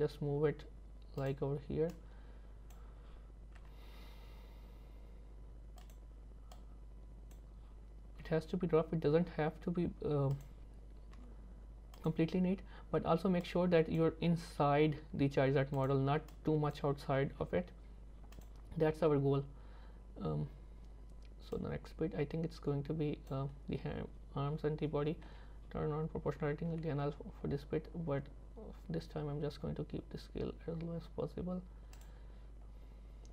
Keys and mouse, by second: 2.1 click, 6.7 click, 11.2 r, 13.5 click, 14.7 g, 16.5 click, 17.4 g, 21.8-23.4 drag, 25.3 o, 26.7 g.